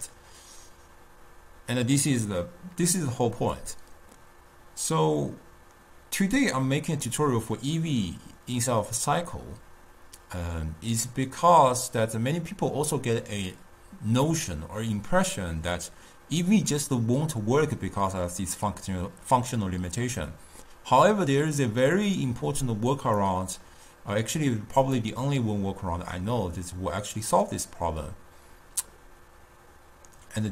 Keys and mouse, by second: 3.7-6.8 drag, 23.4 click.